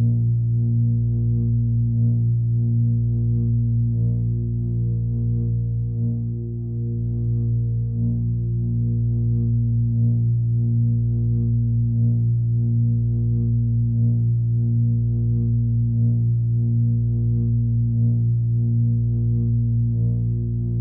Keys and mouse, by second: 0.6 click, 1.7 click, 3.4-4.4 drag, 5.9-15.5 drag, 16.7-17.7 drag, 18.4 click.